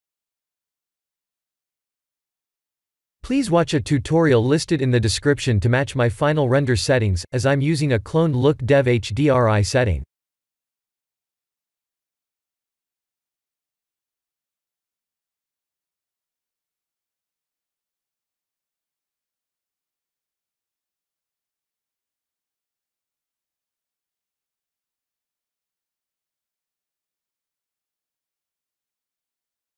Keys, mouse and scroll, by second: 10.0 click, 10.8 click, 12.3 click, 12.9 click, 13.5 click, 14.3 click, 15.7 click, 18.8 click, 23.5 click, 24.0 click, 27.7 click.